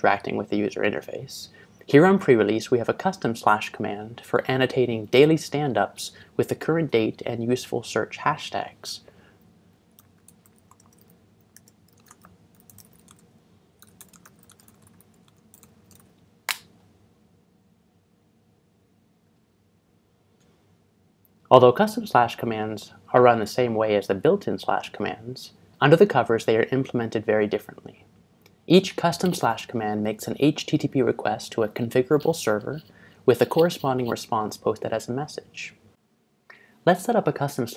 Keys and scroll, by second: 9.4-16.5 typing.